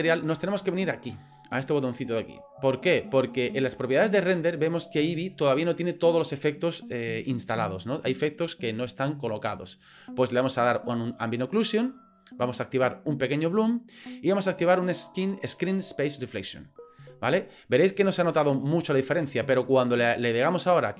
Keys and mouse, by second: 2.9 click, 11.2 click, 13.1 click, 16.4 click, 19.5 click.